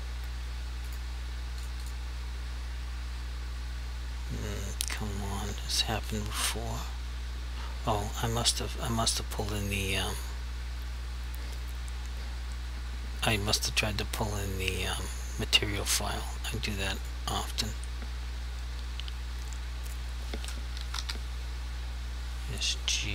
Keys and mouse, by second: 0.9 click, 1.8 double click, 6.1 click, 9.4 click, 17.0 click, 19.8 click, 20.7 s, 21.0 g.